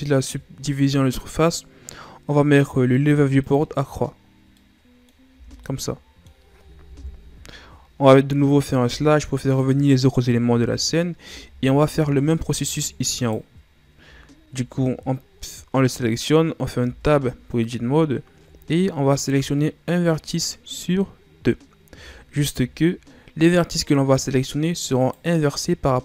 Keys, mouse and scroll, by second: 3.4-4.3 drag, 4.3 scroll down 2, 4.6-5.3 middle drag, 5.3 a, 5.6-6.9 middle drag, 6.9 KP_1, 8.8 KP_Divide, 10.5 KP_1, 11.6-13.2 shift+scroll up 3, 13.2 right click, 14.2-14.8 ctrl+scroll up 1, 14.8-16.8 scroll up 1, 16.8 Tab, 18.1-21.2 ctrl+scroll up 1, 22.4-23.0 shift+scroll up 1, 23.0-25.0 scroll up 1, 25.0 right click.